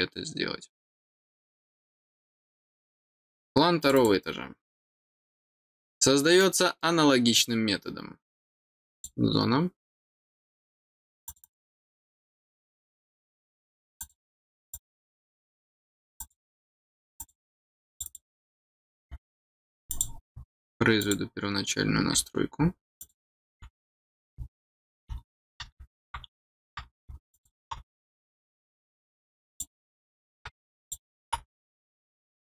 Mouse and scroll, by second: 3.8 click, 5.9 scroll down 2, 6.4 middle click, 8.9 click, 11.2 click, 11.4 click, 14.0 click, 14.5 click, 14.7 click, 16.0 click, 17.0 click, 17.9 click, 19.9 click, 21.0 click, 23.0 click, 27.3 click, 29.5 click, 30.8 click.